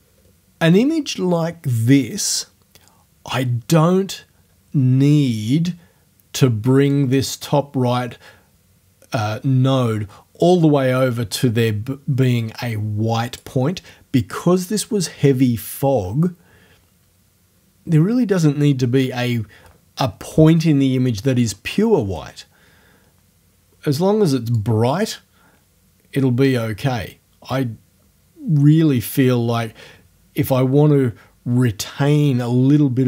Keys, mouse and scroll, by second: 6.9-13.6 drag, 24.6-33.0 drag.